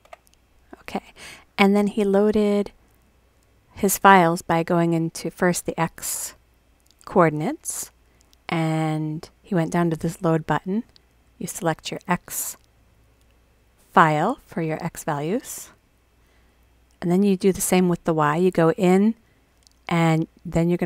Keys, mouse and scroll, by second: 7.3 click, 7.4 click, 10.2 click, 11.6 click, 15.0 click, 15.8 click, 18.8 click, 20.3 click.